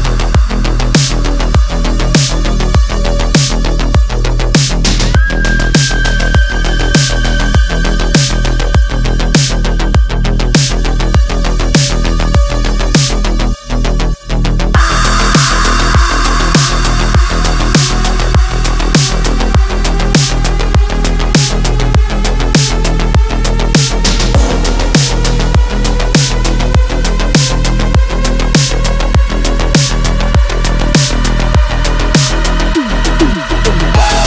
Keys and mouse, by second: 0.2 click, 1.3 g, 6.7 2, 7.0 click, 7.5 g, 10.5 2, 11.0 click, 11.8 ctrl+r, 15.4 1, 16.0-17.1 drag, 17.8 g, 19.7 click, 24.5 shift+middle click, 27.6 click, 29.3 g, 32.9 shift+middle click.